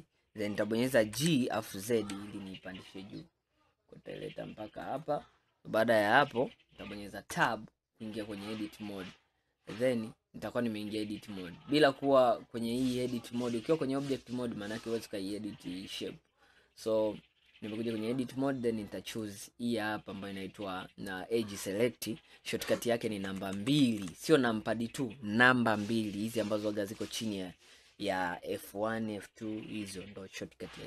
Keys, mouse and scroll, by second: 1.2 g, 7.5 Tab, 10.0-12.7 middle drag, 12.7-15.7 drag, 19.2 click, 23.1 2, 23.4 2, 23.7 2, 24.1 2.